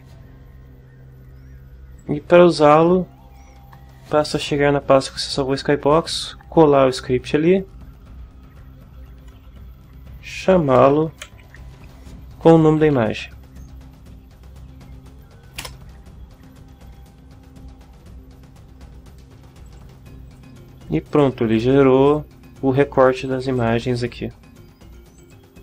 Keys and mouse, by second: 2.0-3.5 drag, 9.3-11.3 typing, 11.5 Tab, 12.6-13.6 typing, 13.6 Tab, 15.6 Return, 19.7 click, 20.3 click, 21.1 click, 21.5 click, 22.1 click, 23.2 click, 23.6 click, 25.2 click.